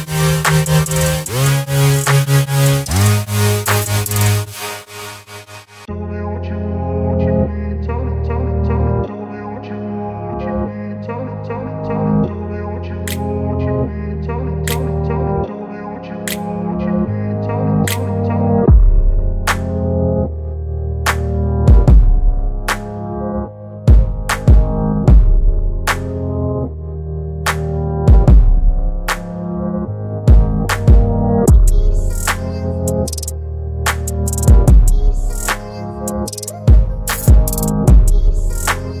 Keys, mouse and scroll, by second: 2.1 click, 4.8 click, 7.0 right click, 7.7-12.9 drag, 15.4 click, 19.8 click, 19.9 ctrl+v, 20.1 t, 23.6 ctrl+t, 25.1-26.0 shift+drag, 26.7-27.3 shift+drag, 28.2-29.8 shift+drag, 31.9-32.9 shift+click, 35.1-36.6 shift+drag.